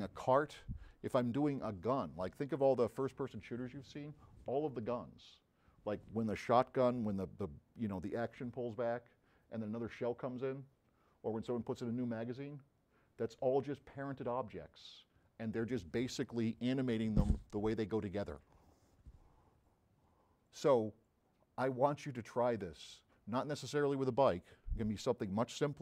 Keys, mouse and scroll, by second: 21.7 click.